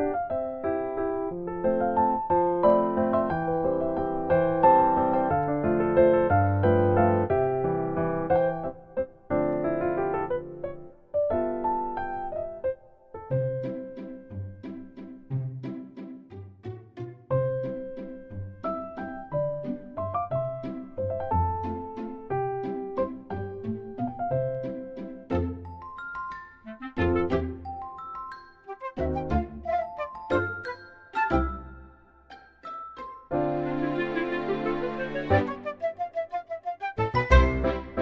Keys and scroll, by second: 1.2 ctrl+z, 9.8 Delete, 10.1 Delete, 10.4 Delete, 13.4 Tab, 13.7 Tab, 15.0 ctrl+c, 16.3 ctrl+v, 25.9 Tab, 28.8 ctrl+z, 29.9 Tab, 30.2 ctrl+c, 31.4 Tab, 31.5 ctrl+v, 31.8 ctrl+z, 32.1 ctrl+z, 32.8 u, 33.1 Tab.